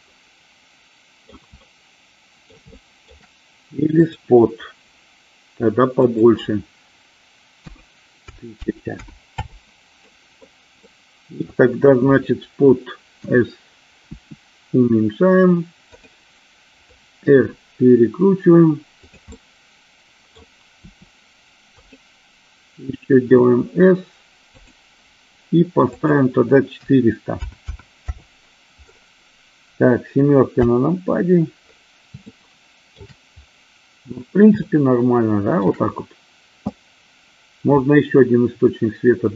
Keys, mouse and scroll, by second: 0.4-1.6 middle drag, 1.8-2.8 middle drag, 2.9-3.3 shift+middle drag, 4.2 click, 6.3-9.8 drag, 8.8 KP_0, 10.3 middle click, 11.0-11.7 middle drag, 13.4 s, 14.3 s, 16.2 click, 17.6 r, 19.2 click, 19.6-20.7 middle drag, 21.0 r, 22.0 click, 23.4 s, 24.7 click, 26.3-28.6 drag, 27.8 KP_0, 30.8 KP_7, 32.6-33.2 shift+middle drag, 34.9-35.9 shift+middle drag.